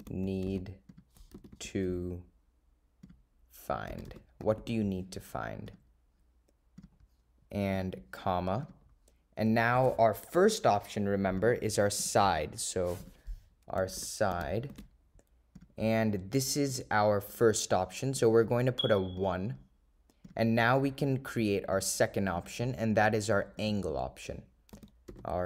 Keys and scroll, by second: 1.0 0, 1.5 4, 2.6 7, 3.2 0, 8.8 ,, 18.3 ,, 19.3 1, 20.4 ,.